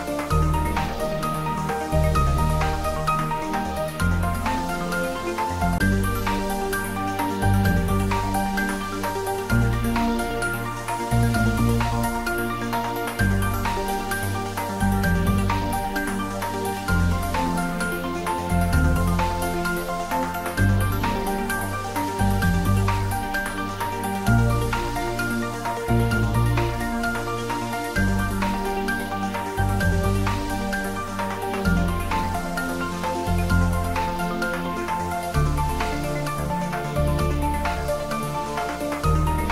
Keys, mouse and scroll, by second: 3.2 click, 3.8-4.7 middle click, 4.3 scroll down 1, 6.6 ctrl+b, 10.6 click, 10.9 scroll down 1, 11.6-12.2 middle click, 12.5 scroll up 1, 14.6 3, 15.1-15.6 scroll up 1, 18.2-19.5 middle drag, 20.1 click, 21.9 alt+click, 22.1 alt+shift+click, 23.5 shift+scroll down 1, 23.8-24.4 middle click, 24.8 g, 25.3 x, 27.6 click, 28.4 f, 31.9-33.1 typing, 33.7 click, 34.0-34.5 scroll down 2, 34.7-35.1 middle click, 35.6 Tab, 36.1-36.6 scroll down 1, 36.6-39.5 middle drag.